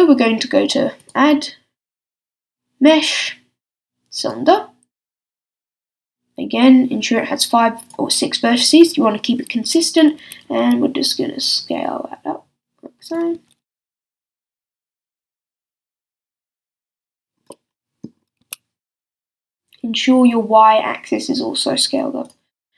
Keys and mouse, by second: 1.0-3.7 drag, 5.4-7.9 drag, 10.2 s, 13.1-16.5 drag, 13.3 s, 16.8 click, 17.5 middle click, 18.4-22.3 drag, 18.4 s.